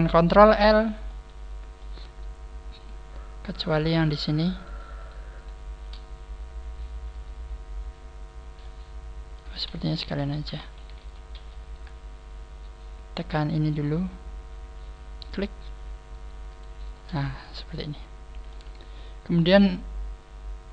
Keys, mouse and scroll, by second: 0.4 ctrl+l, 1.0 middle click, 3.3-4.1 scroll up 2, 4.1 shift+right click, 4.1-4.5 scroll up 4, 5.0 shift+right click, 5.3 shift+right click, 8.5 middle click, 10.0 ctrl+z, 10.6 ctrl+z, 14.0-14.3 scroll down 6, 15.1 click, 15.1 scroll down 3, 16.4 shift+right click, 17.3 middle click, 18.0 click, 19.0-19.5 scroll down 3.